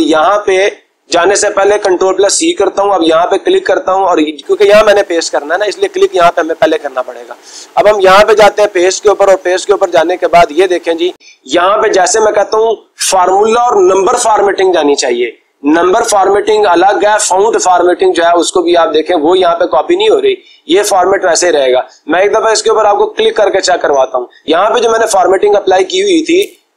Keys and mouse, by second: 1.7 ctrl+c, 3.0 click, 3.8 click, 8.1-9.2 drag, 23.2-24.4 drag.